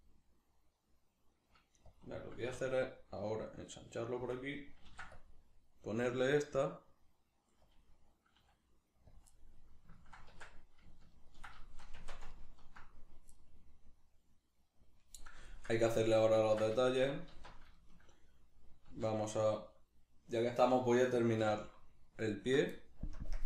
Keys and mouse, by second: 2.0 click, 2.5 s, 4.3 click, 4.9 ctrl+r, 7.8 click, 8.4 s, 9.2 click, 9.3-10.3 middle drag, 10.3 Tab, 10.4-12.0 middle drag, 12.0 Tab, 12.3-17.4 ctrl+middle drag, 17.4 alt+q, 17.8-22.2 shift+middle drag, 18.9 z, 22.0 3, 22.2 alt+right click, 23.2 ctrl+KP_Add.